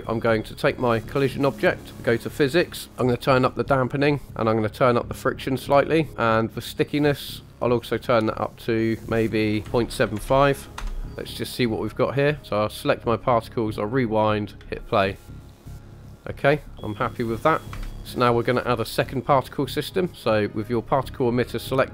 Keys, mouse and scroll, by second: 0.2 middle click, 0.7 click, 2.3 click, 3.5 click, 4.8 click, 6.9-8.6 drag, 8.8-10.7 drag, 11.5 click, 12.4 click, 13.9 click, 14.3 middle click, 14.6 space, 16.3 space, 17.8 KP_1, 18.1-18.4 middle drag, 18.3 click.